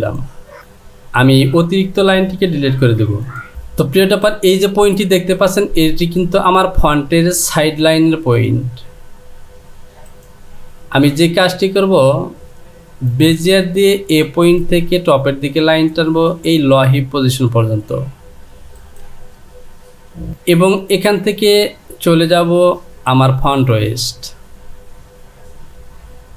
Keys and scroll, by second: 2.9 Delete.